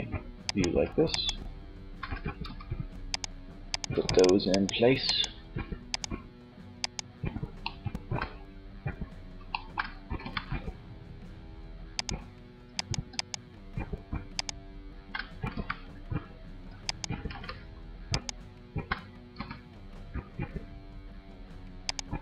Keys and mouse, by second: 1.5 r, 9.5 g, 14.6 g, 16.1-18.5 drag, 16.6 ctrl+z, 18.5 g, 21.2-22.2 drag.